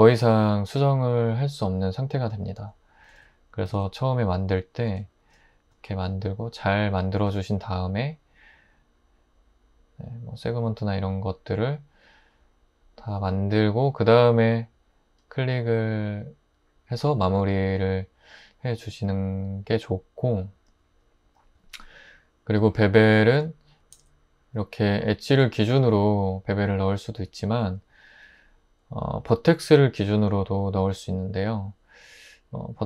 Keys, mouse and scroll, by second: 3.1 super+z, 3.7 super+z, 4.9 super+b, 23.3 super+z, 23.9 super+z, 32.7 1.